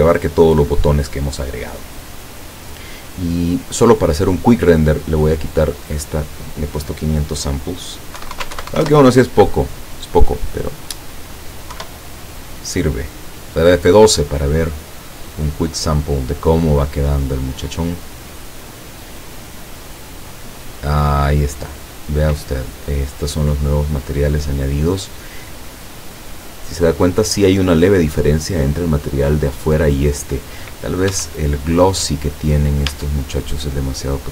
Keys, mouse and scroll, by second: 3.6 click, 4.4-5.2 scroll down 4, 5.7 click, 8.2 KP_1, 8.4 KP_0, 8.5 Tab, 8.6 KP_1, 8.7 KP_0, 8.9 KP_Enter, 11.8 F12, 31.1 Escape, 32.2 right click, 32.9 Tab.